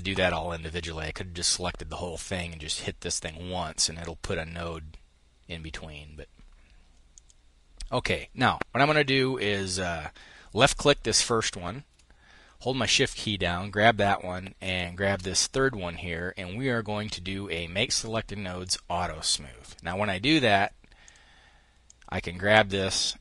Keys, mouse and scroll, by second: 6.6 click, 12.3-14.8 shift+drag, 18.1 click, 20.5 click, 21.3-23.2 drag.